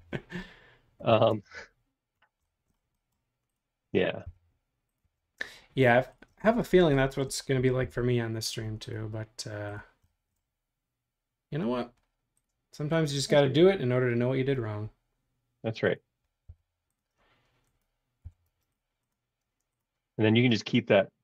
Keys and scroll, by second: 1.3 shift+space, 4.2 m, 6.3 space, 7.8 q, 16.5 m, 18.2 b, 19.4 space.